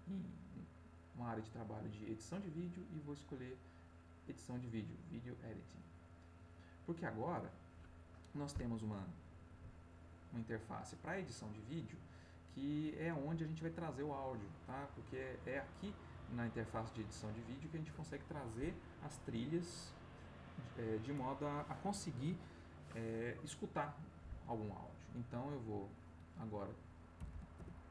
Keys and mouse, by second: 5.6 click, 9.5 middle click, 10.8 middle click, 25.5 click, 27.1 /, 27.5 Return.